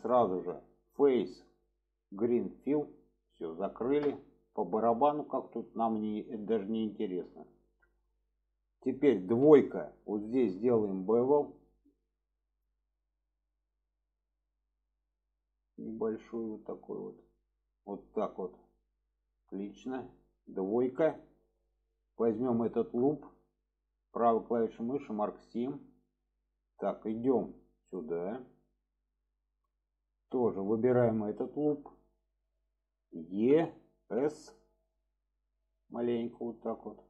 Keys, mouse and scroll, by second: 1.0-2.8 drag, 4.1-4.4 middle drag, 5.5 middle click, 6.1-6.5 middle drag, 6.9 shift+middle drag, 7.4-8.2 middle drag, 10.8 alt+shift+click, 12.5 click, 13.8-17.9 drag, 18.3-18.9 middle drag, 19.5-19.8 middle drag, 21.1 click, 22.5 alt+shift+click, 24.3 right click, 26.1 middle click, 26.6-26.9 shift+middle drag, 27.4 middle click, 28.0 middle drag, 28.8 middle click, 29.9 click, 31.2 alt+shift+click, 32.1 middle click, 36.9-37.0 middle drag.